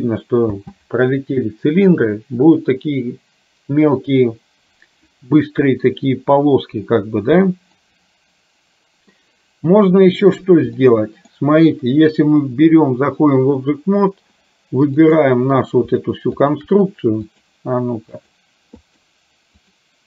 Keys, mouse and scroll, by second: 0.7 space, 8.0-9.2 middle drag, 10.8 middle click, 16.3 shift+click, 17.3 click, 18.2 click, 19.0 click.